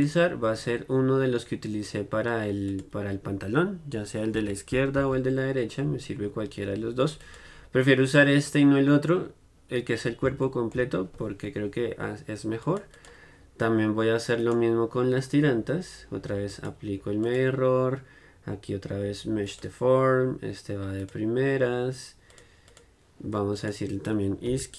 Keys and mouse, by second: 9.0-14.5 middle drag, 14.5-24.7 drag, 14.5-24.7 right drag.